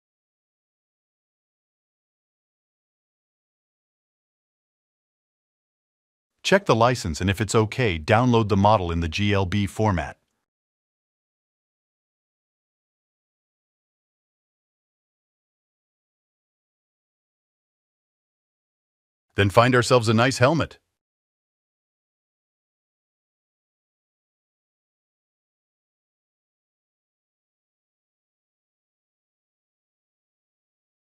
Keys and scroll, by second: 24.5-26.6 typing.